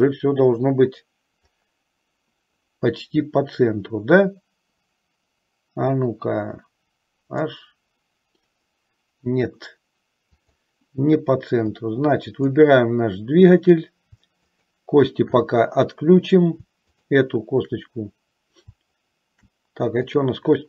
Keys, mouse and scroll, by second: 7.5 click, 10.4 click, 11.8 click, 14.5 shift+click, 17.1 shift+click, 20.2 click.